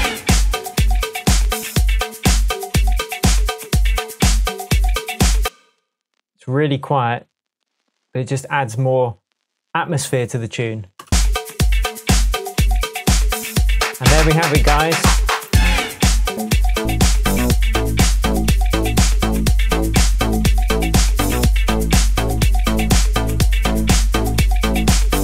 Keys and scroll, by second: 14.9 super+l.